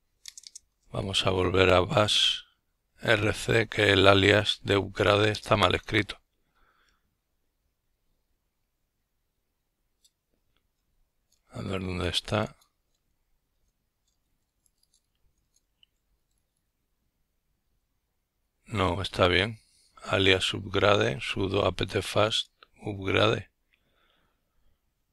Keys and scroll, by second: 0.8 Right, 1.0-2.0 typing, 7.1-7.8 typing, 8.2 Escape, 10.0-10.9 typing, 11.3 Return, 12.3-15.9 typing, 15.9 Return, 19.1-20.8 typing, 21.4 Return, 23.3 Right, 23.9 Return.